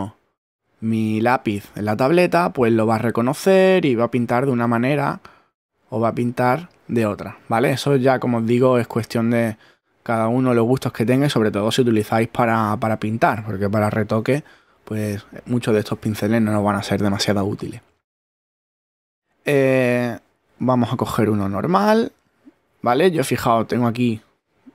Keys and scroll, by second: 7.9 super+z.